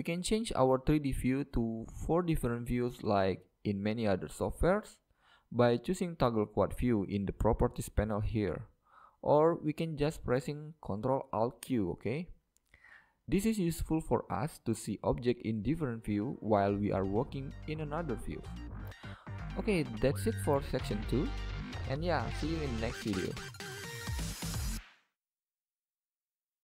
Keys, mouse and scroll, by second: 0.9-2.7 middle drag, 1.9-4.8 drag, 6.3-8.2 drag, 6.8-7.8 scroll up 1, 7.8-8.7 scroll up 1, 9.3-11.2 drag, 12.8-17.9 middle drag, 15.1-16.9 drag, 18.6-21.0 drag, 19.9 middle click, 20.6-21.8 middle drag, 22.5 middle click, 22.7 scroll down 1, 23.1-24.7 middle drag.